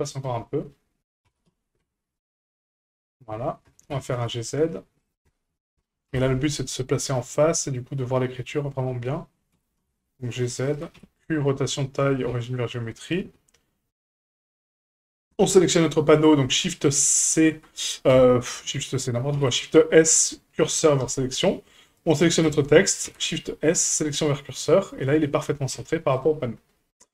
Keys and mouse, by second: 0.1 right click, 1.2 g, 3.6 g, 5.2 middle click, 6.1 KP_1, 7.0 shift+middle click, 9.5 g, 10.9 q, 12.3 q, 14.9 click, 16.9 shift+c, 18.1 KP_Decimal, 19.3 shift+s, 21.9 right click, 23.0 shift+s, 25.7 a, 26.9-27.1 middle drag.